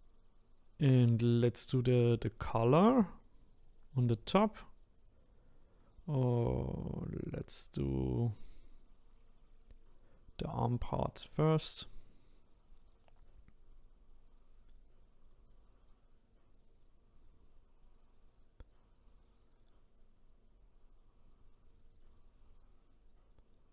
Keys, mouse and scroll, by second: 10.9-14.0 drag.